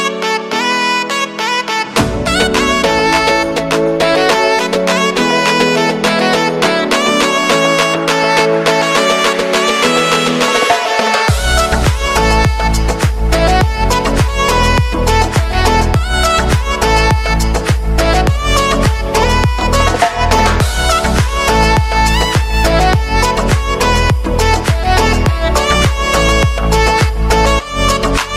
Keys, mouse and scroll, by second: 1.2 space, 3.4 click, 4.6-5.2 typing, 5.5 click, 7.1-7.7 typing, 8.1 click, 9.0 ctrl+a, 9.5 alt+], 10.8 click, 11.6 right click, 12.6 click, 15.5 typing, 17.0 click, 18.0 space, 20.0 space, 20.3 scroll down 1, 21.8-25.3 drag, 25.3 alt+[, 26.5 click, 27.5 [.